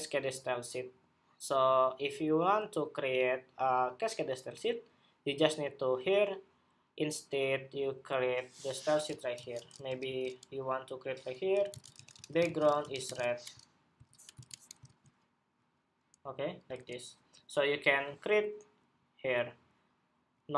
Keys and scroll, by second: 13.7 super+s, 14.1 super+Tab, 14.6 super+r, 16.5 super+Tab.